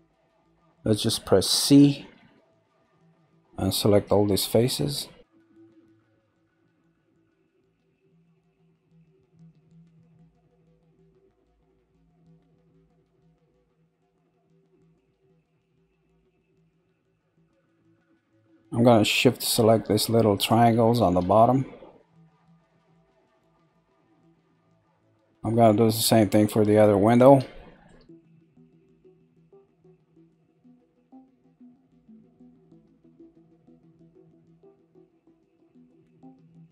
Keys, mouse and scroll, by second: 0.4-2.3 scroll down 1, 2.3 c, 5.1 click, 9.7-13.1 middle drag, 13.1 c, 16.3-16.9 scroll up 1, 16.9-19.9 shift+middle drag, 20.3 shift+click, 21.3-23.5 shift+middle drag, 23.5 shift+click, 24.4-25.4 middle drag, 25.4 scroll down 4, 26.1 middle click, 26.9-27.4 scroll up 2, 27.4 shift+middle click, 28.2 scroll up 1, 28.8-29.5 scroll up 1, 29.5-31.4 shift+middle drag.